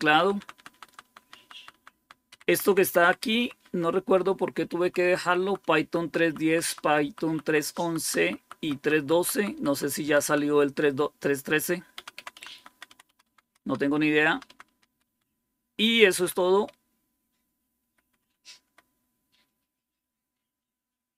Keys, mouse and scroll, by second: 0.0 Down, 0.2 Down, 0.4 Down, 0.6 Down, 0.9 Down, 1.1 Down, 1.3 Down, 1.6 Down, 1.8 Down, 2.2 Up, 2.4 Up, 2.5 Up, 2.7 Up, 2.9 Up, 3.1 Up, 3.3 Up, 3.5 Up, 4.7 Right, 4.9 Right, 5.1 Right, 5.3 Right, 5.5 Right, 5.9 Right, 6.1 Right, 6.5 Right, 6.7 Right, 7.3 Right, 7.5 Right, 7.9 Right, 8.1 Right, 8.5 Right, 8.7 Right, 9.9 Right, 10.1 Right, 10.3 Right, 11.8 Down, 12.0 Down, 12.2 Down, 12.4 Down, 12.6 Down, 12.8 Down, 13.1 Down, 13.3 Down, 13.5 Down, 13.7 Down, 13.9 Down, 14.3 Down, 14.6 Down, 14.8 Down, 15.1-16.3 Down, 16.6-17.6 Up.